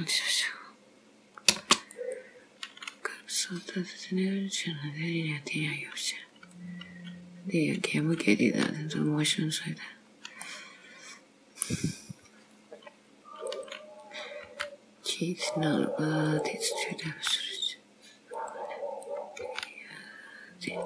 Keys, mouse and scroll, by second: 1.9 click, 6.6 click, 8.0 click, 8.5 g, 10.1-10.5 scroll down 2, 10.5 middle click, 12.0-12.4 scroll up 3, 13.6 click, 14.5 g, 16.9 click, 17.2 g, 19.2 click, 19.6 g.